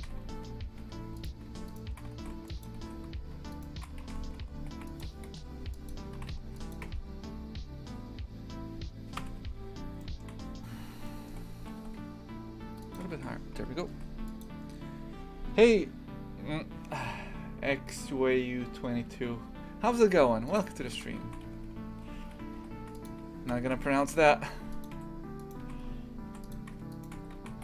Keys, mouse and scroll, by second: 0.0 shift+f, 1.7 alt+shift+right click, 2.2 shift+f, 2.8 ctrl+z, 3.5 alt+shift+right click, 4.0 shift+f, 5.9 Delete, 6.2 shift+f, 6.9 Tab, 9.2 KP_3, 10.0 shift+middle click, 10.4-11.1 scroll up 2, 11.1 shift+middle click, 11.7 g, 13.2 shift+f, 20.6 click, 21.3 shift+f, 23.5 KP_Divide, 23.7 Tab, 24.0 shift+f, 24.9 2, 25.4 right click, 25.6 shift+f, 26.9 shift+right click, 27.2-27.6 typing.